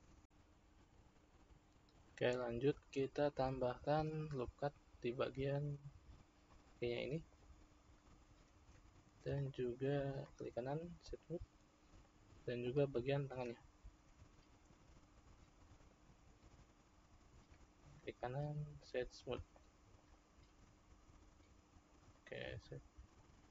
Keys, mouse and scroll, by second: 0.7-2.8 scroll up 2, 2.8 Tab, 4.8 ctrl+r, 8.6 Tab, 9.4-10.1 shift+middle drag, 10.1-11.9 right drag, 11.9 click, 13.4 Tab, 14.6 ctrl+r, 17.4 Tab, 17.8-19.6 right drag, 19.6-20.2 shift+middle drag, 20.2-22.0 scroll down 1, 22.0 scroll down 1, 22.1-23.5 shift+middle drag.